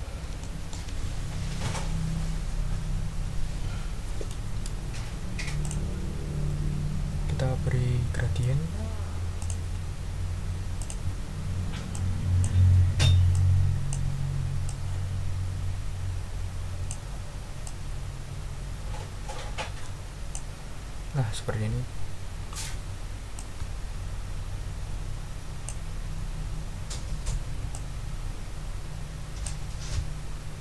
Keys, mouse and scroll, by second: 0.4 ctrl+middle click, 5.6 click, 7.2 scroll down 2, 9.4 click, 10.8 click, 11.9 click, 13.3 click, 14.6-17.1 drag, 17.6-20.5 drag, 20.6 ctrl+scroll down 2, 21.9-22.6 ctrl+scroll up 4, 23.3-25.8 ctrl+drag, 27.7-29.6 ctrl+drag, 30.3-30.6 ctrl+scroll down 4.